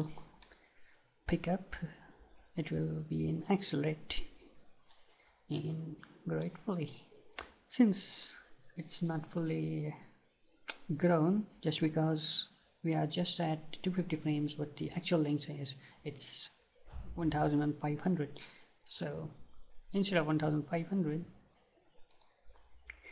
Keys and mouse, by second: 22.2-23.1 drag.